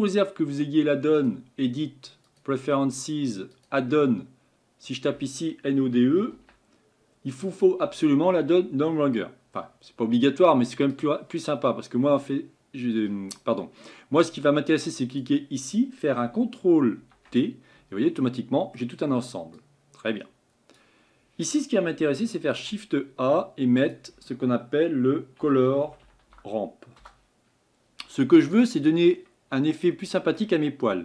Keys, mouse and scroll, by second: 2.5-5.9 drag, 15.2 click, 17.0 ctrl+t, 29.5-30.0 scroll up 8.